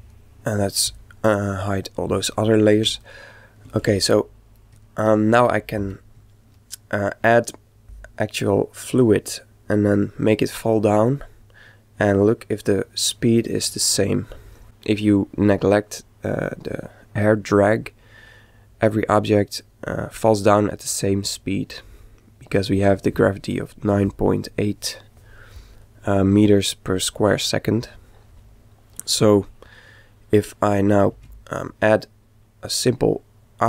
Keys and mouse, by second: 0.0-2.5 drag, 3.0-5.5 middle drag, 5.8 shift+c, 31.1 shift+a.